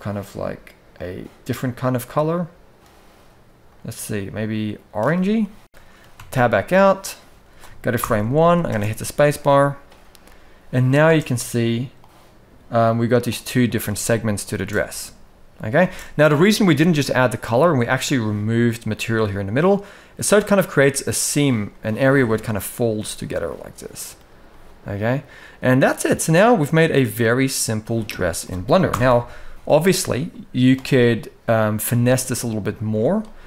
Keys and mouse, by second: 5.1 middle click, 6.5 Tab, 7.7 shift+Left, 8.0 alt+a, 8.4 space, 11.0 space, 11.7 click, 12.6 click, 13.5 alt+a, 13.7-14.1 middle drag, 14.2 space, 15.8 space, 15.8-16.3 middle drag, 17.2 shift+middle drag, 18.6-20.2 middle drag, 21.3-21.7 middle drag, 22.6-23.7 middle drag, 24.1-25.7 middle drag, 26.0-26.8 middle drag, 27.7 middle drag, 28.6 shift+Left, 29.3 KP_1, 30.4 click, 31.6 Tab, 32.1 shift+middle click, 32.6 z.